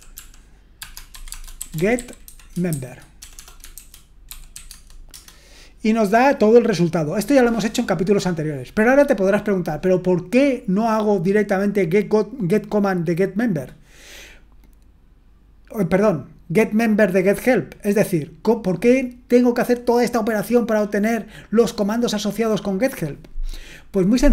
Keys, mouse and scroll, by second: 0.0-5.0 typing.